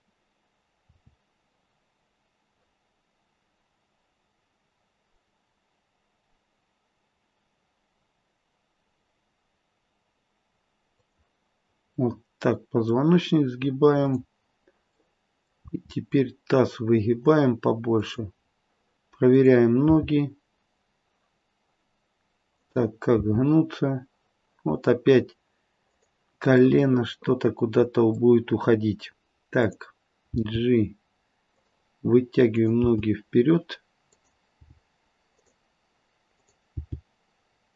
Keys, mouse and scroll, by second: 0.9 r, 12.0 middle click, 12.2 middle click, 13.9 click, 14.9 middle click, 15.6 r, 18.4-19.2 scroll down 3, 19.2 click, 19.8 g, 23.1 r, 26.6 middle click, 29.5 click, 30.3 g, 32.5 click, 33.0 g, 34.5 g, 36.3 click, 36.9 g.